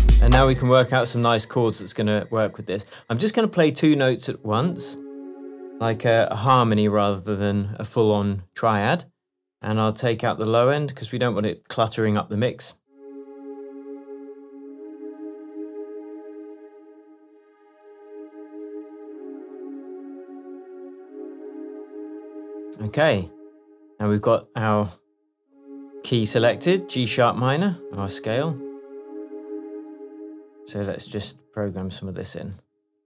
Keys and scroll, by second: 0.6 space, 6.6 shift+super+m, 7.8 shift+Tab, 30.8 super+1, 32.6 super+2.